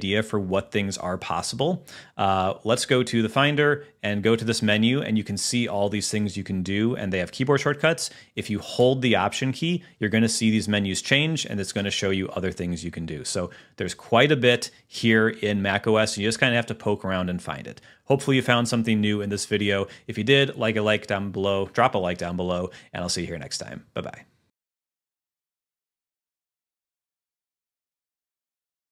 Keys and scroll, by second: 1.6 super+h.